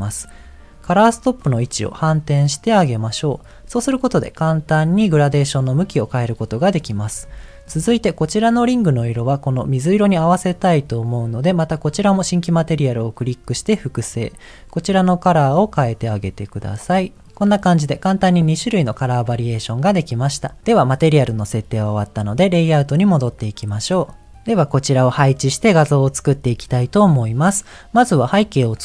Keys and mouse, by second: 0.6 click, 1.5 click, 2.3 click, 7.6 middle click, 8.7 click, 10.3 click, 14.0 click, 14.8 click.